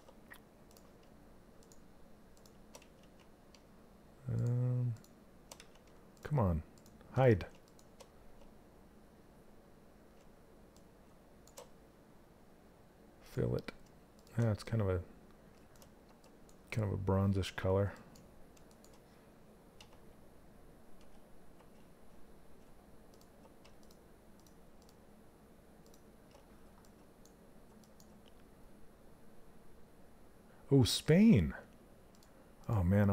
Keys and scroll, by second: 19.3 z, 21.1 z.